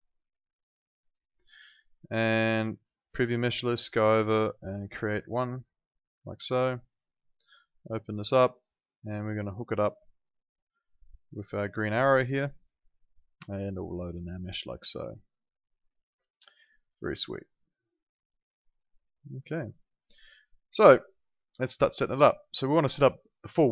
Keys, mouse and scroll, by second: 5.6 click, 8.2 click, 12.5 click, 16.9 right click, 17.7 click.